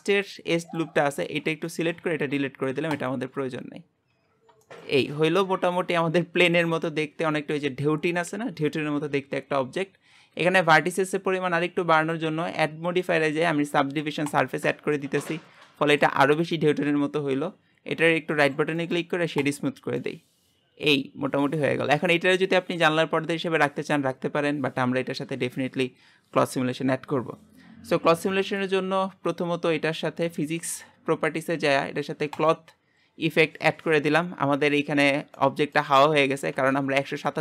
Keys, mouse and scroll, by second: 0.2 click, 1.2 alt+shift+click, 1.7-3.6 shift+middle drag, 3.6 x, 4.1 Tab, 4.4 scroll down 2, 4.6-12.0 shift+middle drag, 14.4 click, 15.0-19.5 middle drag, 19.5 right click, 20.0-32.6 middle drag, 32.6-35.0 drag, 35.0-35.4 scroll down 4, 35.4 middle click, 35.9-37.4 scroll up 4.